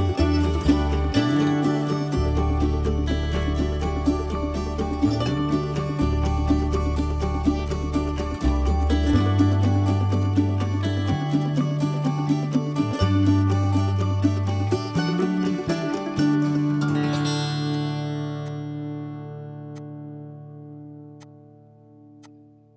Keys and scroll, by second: 2.7 ctrl+g, 6.4 p, 8.8 Escape, 9.9 m, 17.3 i, 19.3 Escape, 21.7 Escape.